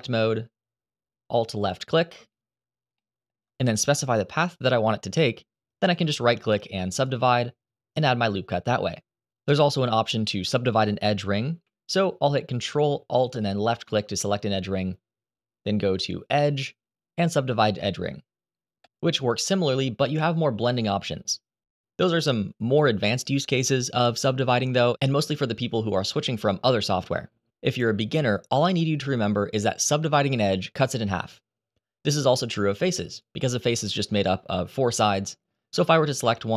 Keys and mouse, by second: 0.1 2, 1.3 ctrl+alt+click, 2.7 middle click, 5.7-6.8 right drag, 13.1 ctrl+alt+right click, 16.1-18.6 drag, 20.0-21.3 drag, 22.0 click, 24.3-27.8 drag, 32.2 click, 32.8 click, 35.5-36.5 right drag.